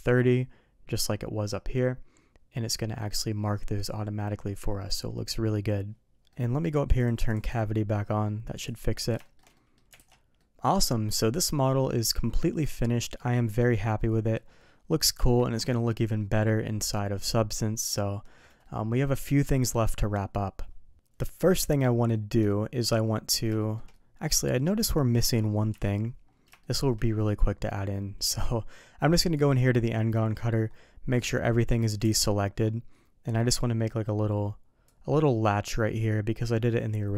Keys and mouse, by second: 2.8 middle click, 4.3-4.9 middle drag, 6.3 middle click, 7.4-8.9 drag, 9.2 shift+middle drag, 9.5 middle click, 10.0 alt+a, 10.4-13.5 middle drag, 14.0 middle drag, 15.1 KP_3, 18.6-19.7 middle drag, 22.1-23.3 middle drag, 23.6 shift+middle drag, 23.9-24.8 middle drag, 25.7 KP_3, 26.6 shift+middle drag, 28.3 d, 31.1 click, 32.1 alt+a, 34.8-37.1 drag.